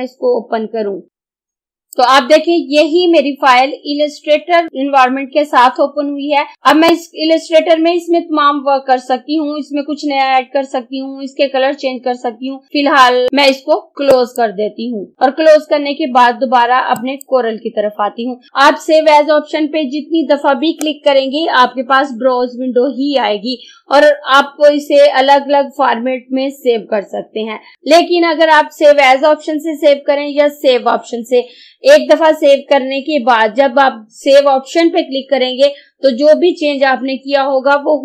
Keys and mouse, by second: 1.8-4.6 drag, 6.5 ctrl+z, 6.7 click, 14.1 click, 16.9 click.